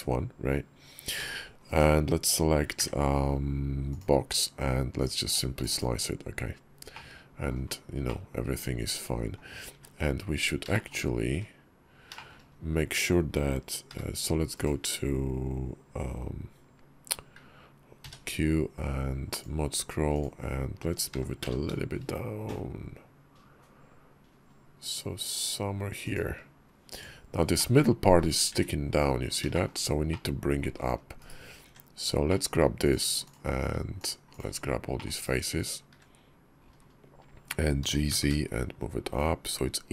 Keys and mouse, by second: 1.0 b, 2.6 d, 4.8-6.1 drag, 6.8-7.4 drag, 7.9-9.2 drag, 9.6 `, 10.5 shift+click, 11.2 `, 12.0 shift+click, 13.7 g, 17.8 q, 21.0 g, 27.4 middle click, 29.4 shift+click, 30.0 click, 31.0 /, 31.5 Tab, 32.1 click, 32.7 click, 33.1 shift+click, 33.8 shift+click, 34.2 shift+click, 34.8 middle click, 35.7 /, 35.7 `, 37.7 g.